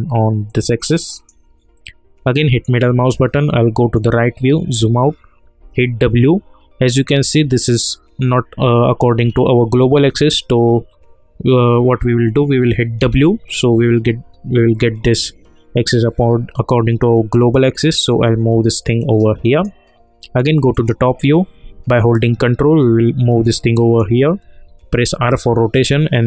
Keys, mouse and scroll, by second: 2.4 middle click, 4.3 scroll down 1, 5.6 e, 13.0 w, 18.1-20.2 drag, 20.2 middle click, 22.0-25.1 ctrl+drag, 25.1 r.